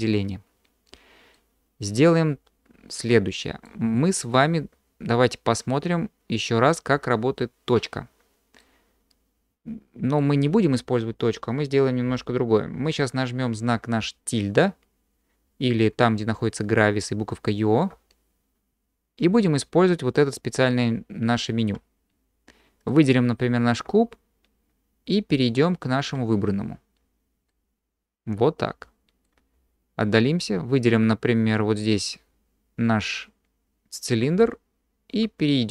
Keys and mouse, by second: 1.3-2.4 middle drag, 2.4-3.7 drag, 8.6-10.2 drag, 27.5-28.1 middle drag, 28.1-29.2 drag.